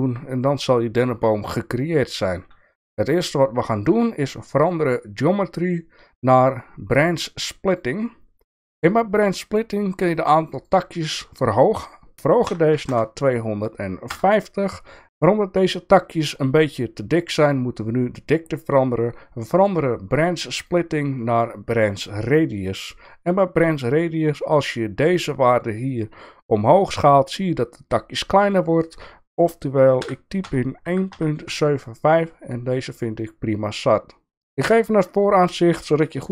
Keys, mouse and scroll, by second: 4.6-7.8 drag, 10.6-15.6 drag, 20.7-22.3 drag, 25.9-28.5 drag, 28.8-32.2 drag, 34.6 KP_1, 35.6 shift+middle click.